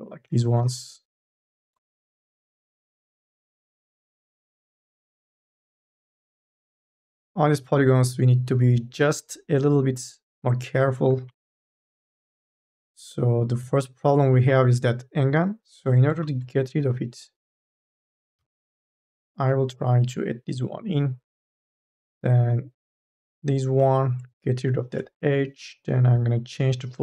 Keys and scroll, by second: 0.5 space, 2.4 space, 4.0 space, 6.0 3, 6.2 e, 7.3 3, 10.9 1, 12.0 m, 12.4 e, 18.5 ctrl+z.